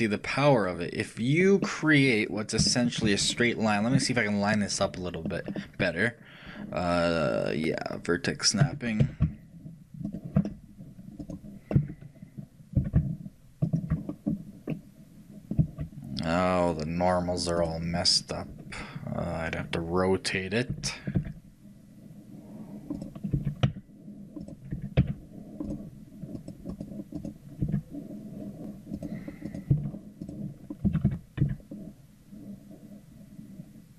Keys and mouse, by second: 8.7 g, 11.8-14.1 right drag, 11.8 g, 14.1-17.7 middle drag, 17.7-23.4 shift+right drag, 23.4 r, 27.7-31.5 right drag, 27.7 r, 29.8 r, 30.9 a, 31.5 r.